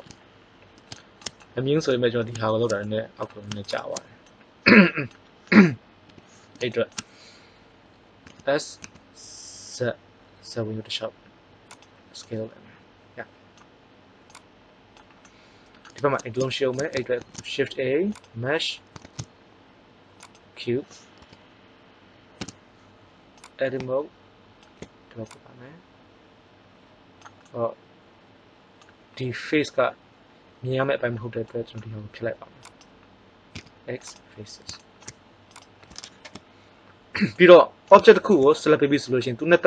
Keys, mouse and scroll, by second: 0.5-2.0 middle drag, 3.5-4.4 right drag, 6.1 KP_3, 8.1 s, 14.2 click, 17.1 shift+a, 19.0 shift+a, 21.1 KP_1, 22.3 Tab, 23.3-24.8 drag, 27.4 middle click, 32.5 right click, 33.4 x, 33.6 click.